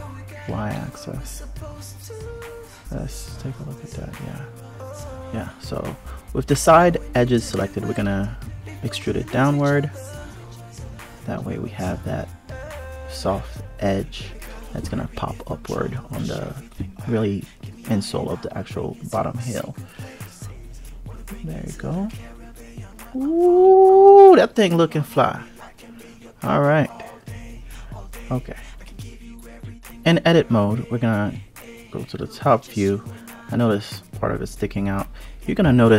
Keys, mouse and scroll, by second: 0.4 alt+click, 1.8 click, 4.3 click, 6.0 e, 9.2 click, 10.6 click, 12.4-12.9 scroll down 1, 12.9-13.9 scroll up 1, 13.9 Tab, 15.6 KP_Divide, 16.3 click, 17.6 click, 19.6 click, 25.9 click, 26.9 click, 29.2 click, 30.3 alt+z, 30.6 click, 31.5 click, 33.7 click, 34.7 KP_7, 35.5 alt+z.